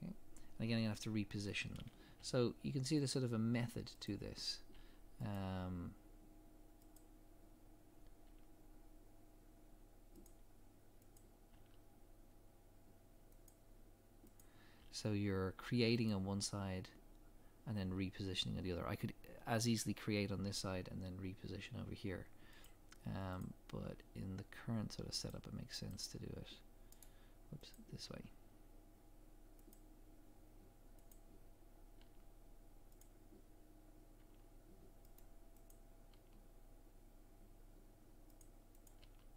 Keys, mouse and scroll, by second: 0.8-2.2 scroll up 1, 2.2 g, 4.0 click, 4.8 g, 6.9 click, 8.2 g, 11.2 click, 11.5 g, 14.4 click, 14.8 g, 22.6 click, 23.8 g, 25.9 click, 25.9 g, 27.7 click, 28.1 g, 31.1 click, 32.0 g, 33.0 click, 34.2 g, 35.7 click, 36.1 g, 38.8 click, 39.0 g.